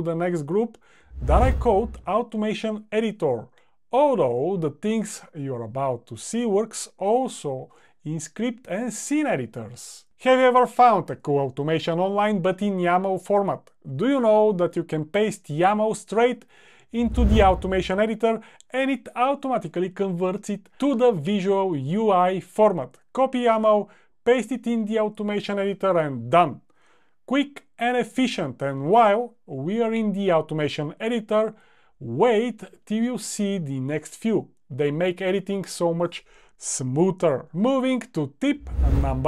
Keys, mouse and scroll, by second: 26.2 click, 26.6 super+v.